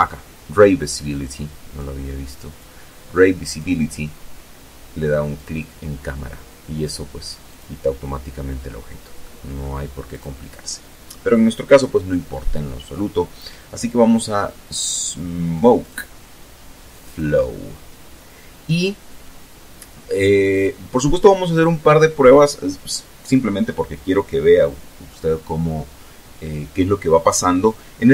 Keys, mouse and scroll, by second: 0.0 click, 2.0 click, 2.6-2.9 scroll down 3, 3.9 click, 6.0 click, 7.8 middle click, 8.6 click, 14.4 click, 15.6 click, 18.5 scroll down 1, 19.4-19.8 scroll up 2, 27.6 alt+a.